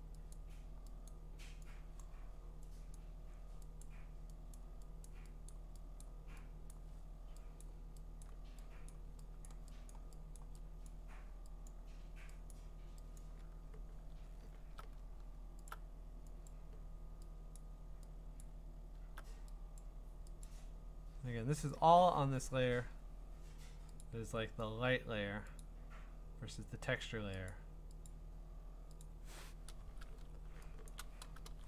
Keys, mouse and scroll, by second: 0.3 click, 1.1 click, 2.0 click, 3.0 click, 3.8 click, 4.6 click, 5.1 click, 5.5 click, 6.0 click, 6.7 click, 7.6 click, 8.2 click, 8.9 click, 9.5 click, 9.9 click, 10.4 click, 10.9 click, 11.7 click, 12.5 click, 13.2 click, 14.1-14.6 scroll, 15.7 alt+click, 16.5 click, 17.6 click, 18.4 click, 20.5 click, 21.7 click, 22.6-23.6 scroll, 24.0 click, 25.7 click, 27.5 click, 28.1 click, 29.0 click, 31.0 click.